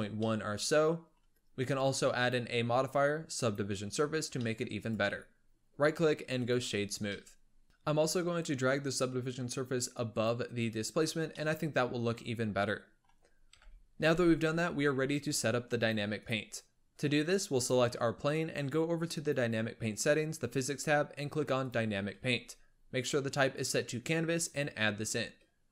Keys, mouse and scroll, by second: 0.0 scroll down 1, 0.1-2.1 middle drag, 2.1-4.3 drag, 4.3-4.7 middle drag, 4.7-7.0 right drag, 7.0-7.6 middle drag, 7.6 click, 8.8-10.2 drag, 11.2-13.4 middle drag, 13.4 KP_7, 15.6-17.6 drag, 19.0 click, 21.5-25.7 drag.